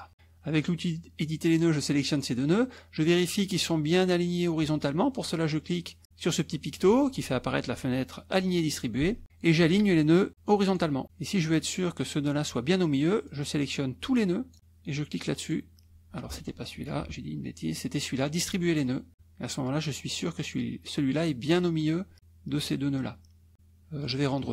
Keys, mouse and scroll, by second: 0.6 click, 1.6 click, 6.8 click, 13.3-14.6 drag, 15.4 click, 16.8 ctrl+z, 24.0 click.